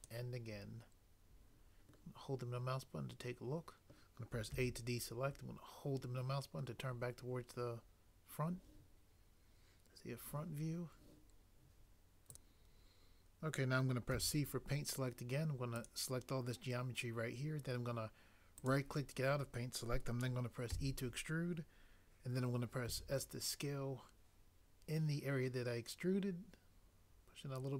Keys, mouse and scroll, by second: 4.5 a, 14.1 c, 18.7 right click, 20.7 e, 22.8 s.